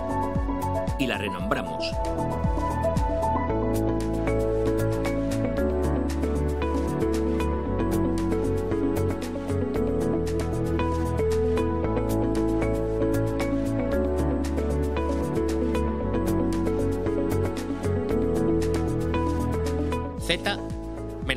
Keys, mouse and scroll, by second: 3.8 click, 5.4 click, 7.2 F2, 8.2 Right, 8.5 BackSpace, 11.1-14.9 typing, 19.7 click, 20.3 click.